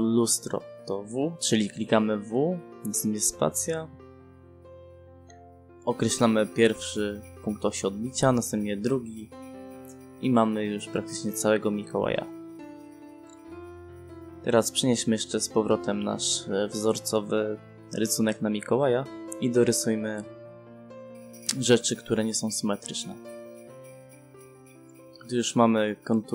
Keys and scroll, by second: 3.6 space, 7.7 space, 11.3 e, 11.5 space, 16.8 space, 19.5 5, 20.2 0, 21.1 space, 24.1 s, 24.5 space.